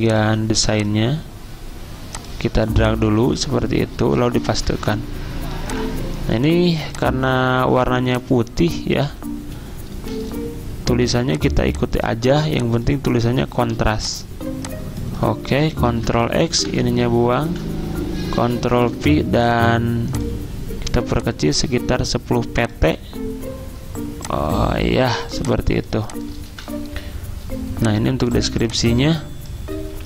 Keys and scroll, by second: 4.5 ctrl+v, 10.1 d, 13.8 t, 15.5 ctrl+x, 15.9 ctrl+a, 16.6 Delete, 17.5 ctrl+v, 18.9 ctrl+a, 25.2-27.0 typing.